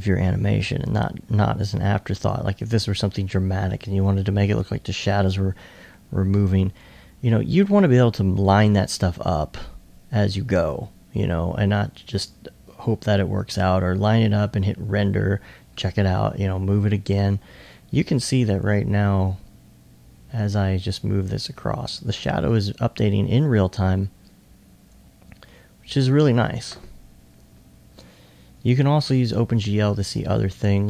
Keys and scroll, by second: 27.5 2, 28.0 2, 29.7 alt+s, 30.1 alt+s.